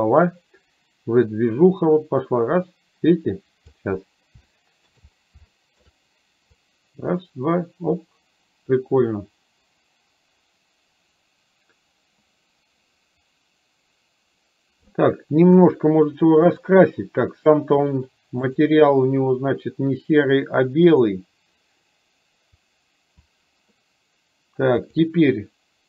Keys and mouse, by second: 4.5-4.9 shift+middle drag, 5.6 shift+middle click, 6.6-15.0 drag, 15.5 KP_1, 16.5 click, 18.6 click, 21.0 click, 24.9 click.